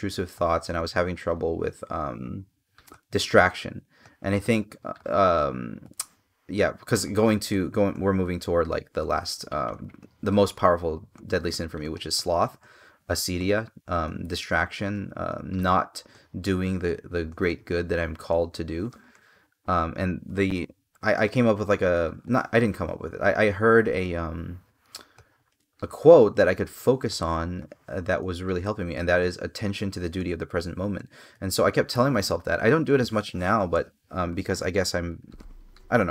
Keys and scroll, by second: 12.7 space, 30.7 space, 32.2 space, 33.5 space.